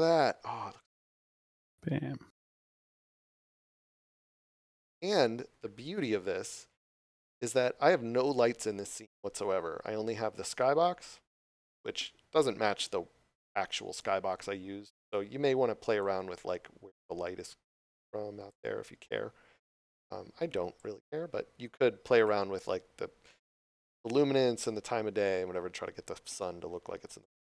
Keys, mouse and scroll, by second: 0.8 click, 14.9 scroll down 1, 16.0 click, 18.9 scroll up 1, 19.9 click, 27.2 click.